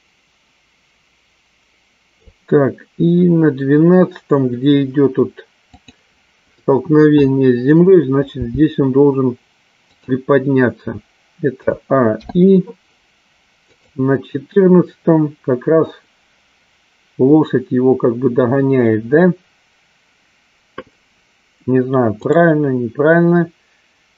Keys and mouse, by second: 5.9 click, 8.5 g, 12.6 i, 14.4 click, 22.8 click.